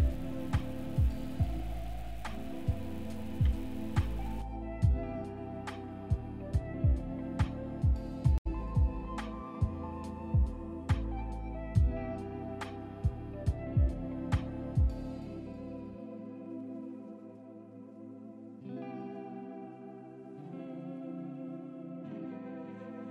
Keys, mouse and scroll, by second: 2.1-2.6 scroll down 2, 2.6 click, 3.1 click, 4.0 click, 4.2 click, 4.6 click, 4.9 middle click, 5.4 scroll up 1, 5.6 click, 5.9-6.3 middle drag, 6.3 click, 6.7 click, 7.3 n, 7.6 click, 8.3 click, 9.3 click, 9.9 click, 10.4 click, 10.8-11.2 middle drag, 11.2-11.6 scroll up 1, 11.6 middle click, 12.0-12.5 scroll up 3, 12.5-16.0 middle drag, 18.8 click, 20.9 click.